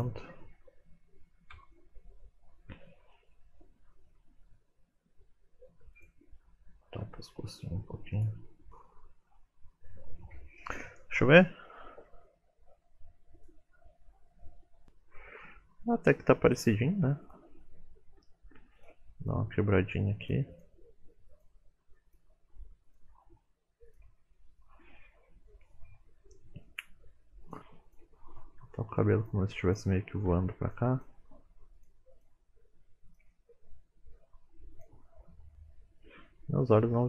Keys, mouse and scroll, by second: 1.5 KP_1, 2.3 middle click, 2.7 shift+middle click, 2.8 scroll up 1, 3.4 click, 3.8 r, 4.8 click, 6.9-7.3 scroll down 4, 7.3 shift+middle click, 7.5 scroll up 1, 8.0 scroll down 1, 8.5 KP_1, 12.5-12.9 scroll down 3, 12.9 middle click, 13.3 KP_1, 16.5 shift+middle click, 16.5-17.2 scroll up 3, 17.2 click, 18.1 r, 19.2 click, 19.8 r, 20.5 click, 21.0 r, 21.7 click, 21.8 r, 22.2 shift+middle click, 22.3 scroll up 4, 22.6 middle click, 23.2 click, 23.4 middle click, 23.7 middle click, 23.9-27.1 typing, 24.2 middle click, 24.4 click, 24.9 click, 25.6 click, 25.9 middle click, 26.4 click, 26.9 click, 27.5 middle click, 27.8 click, 28.2 middle click, 28.6 r, 29.6 click, 30.2 r, 30.9 click, 31.4 r, 32.0 click, 32.1 r, 32.4 middle click, 32.9 click, 33.1 r, 33.5 click, 33.9 r, 34.2 middle click, 35.2 shift+middle click, 35.4-36.8 scroll up 4, 35.5 middle click, 36.9-37.0 scroll down 2.